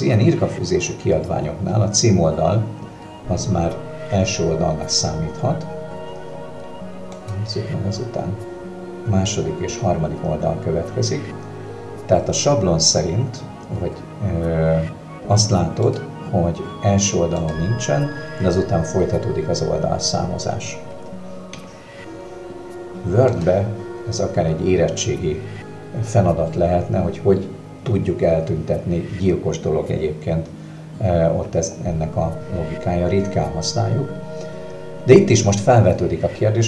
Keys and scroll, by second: 23.4 Escape.